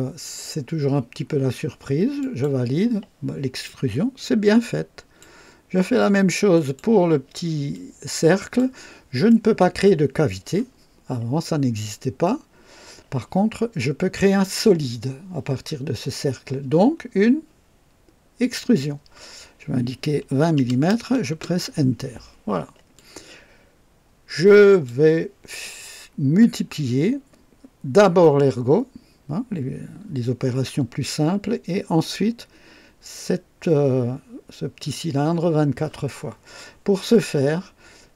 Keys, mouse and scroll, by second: 2.1 click, 3.6-5.3 drag, 6.4 click, 7.6-8.7 drag, 18.3 click, 20.2 KP_2, 20.4 KP_2, 20.5 KP_0, 21.2 KP_Enter, 22.9-25.0 drag.